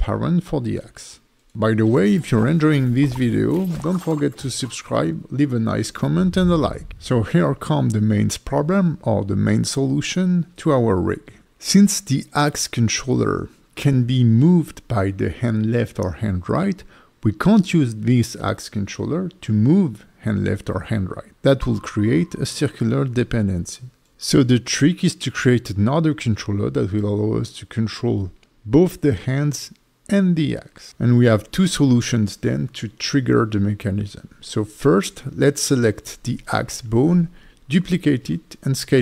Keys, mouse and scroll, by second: 36.9 click, 37.2 scroll up 1, 37.5 Tab, 37.5 shift+click, 37.5 shift+d, 37.9 s, 38.5 click.